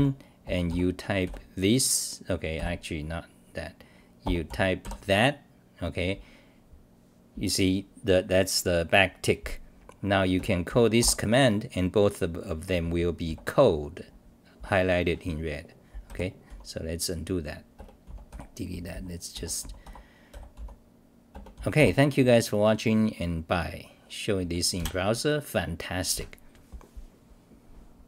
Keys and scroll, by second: 2.6 f, 13.2 c, 16.1 i, 16.5 t, 18.7 t, 20.1-21.0 typing, 22.3 scroll down 3.